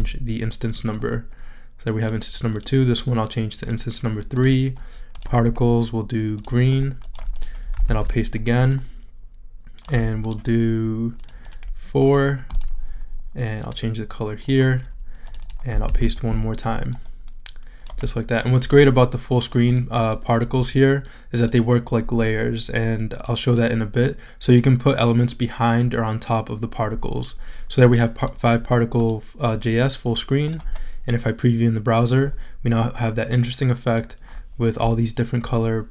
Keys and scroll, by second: 7.8 super+v, 15.8 super+v.